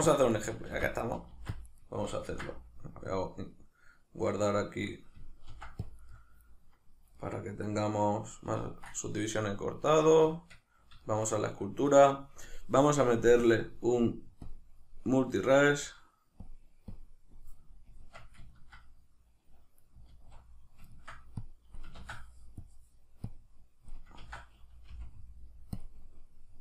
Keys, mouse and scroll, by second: 0.4 right click, 0.7 ctrl+r, 1.1 right click, 1.3 ctrl+r, 1.8 right click, 2.3 ctrl+s, 4.5-6.1 middle drag, 5.5 ctrl+r, 6.1-7.2 right drag, 7.2-13.4 middle drag, 10.2 Tab, 12.8 Tab, 13.4-18.5 drag, 17.9 Tab, 18.5-21.4 ctrl+middle drag, 20.1 alt+q, 21.4-25.8 drag, 22.0 ctrl+z, 24.2 ctrl+z.